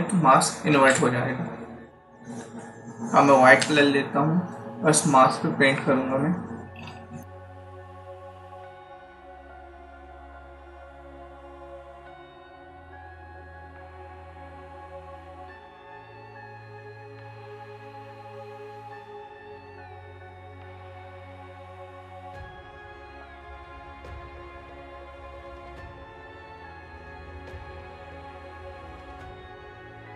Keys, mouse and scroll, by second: 3.5 x, 6.5-7.1 scroll up 5, 7.7-8.1 typing, 8.2 click, 9.8 click, 10.5 typing, 10.7 click, 11.2-11.5 scroll down 1, 11.5 click, 11.7 scroll down 1, 11.9 space, 12.0 click, 12.1 space, 12.3 click, 13.4-19.7 typing, 13.6 click, 14.1 click, 14.3 click, 17.3 click, 18.3 click, 19.2 click, 20.3 click, 21.2 space, 21.3 click, 21.4 space, 21.7 click, 22.4 space, 22.5 click, 22.6 space, 23.0 click, 24.1 space, 24.2 click, 24.3 space, 24.7 click, 25.8 scroll up 1, 26.4 click, 27.2 space, 27.3 click, 27.4 space, 28.6 click, 29.4 space, 29.5 click, 29.6 space, 29.9 click.